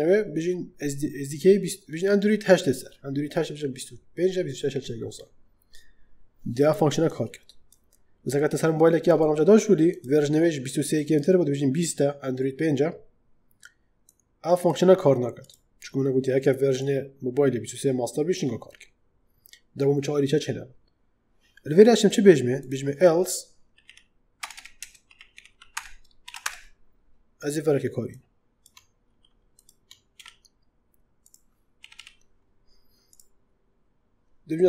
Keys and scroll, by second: 23.6-26.2 typing, 24.7 Return, 25.6 Return, 26.3 Return, 28.9 ctrl+x, 30.0 ctrl+v, 31.7 /.